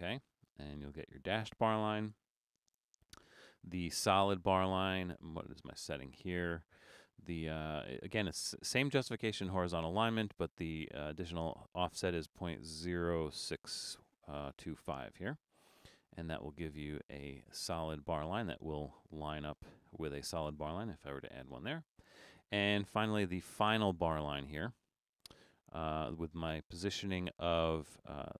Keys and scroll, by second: 2.2 BackSpace, 21.2 BackSpace.